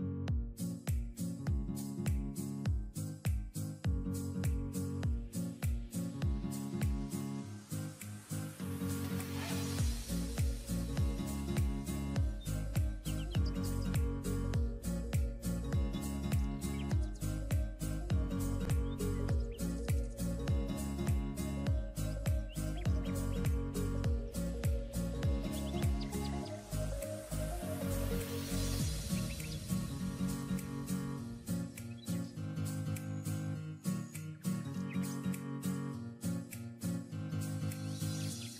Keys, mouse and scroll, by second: 5.5 typing, 7.2 typing, 17.2 typing, 19.5-19.9 alt+scroll down 1, 20.6-21.1 alt+scroll down 1, 21.3-21.9 alt+scroll down 1, 22.1 alt+scroll, 22.2-22.8 alt+scroll up 1, 23.2-23.5 alt+scroll up 1, 23.7-24.3 alt+scroll up 1, 24.4-24.8 alt+scroll up 6, 27.1 typing, 27.6 double click, 32.4 double click.